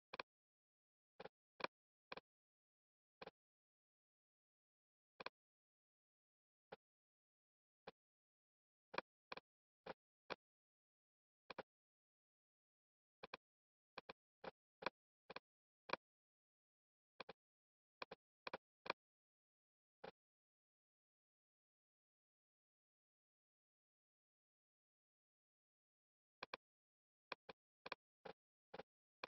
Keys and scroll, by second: 19.7 Return.